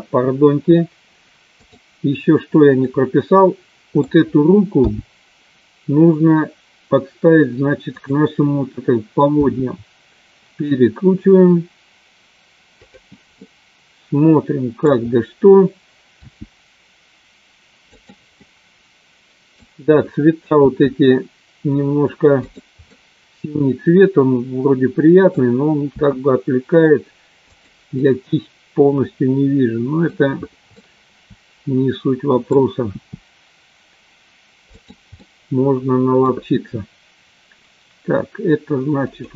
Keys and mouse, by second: 1.5 click, 2.9-4.0 middle drag, 5.1 g, 8.2 click, 9.6 r, 13.4-14.7 middle drag, 16.4 r, 18.4-19.5 middle drag, 20.9 r, 23.1-25.3 middle drag, 26.2 g, 28.0-30.0 middle drag, 30.7-32.6 middle drag, 32.9 r, 35.2-36.2 middle drag, 36.8 r.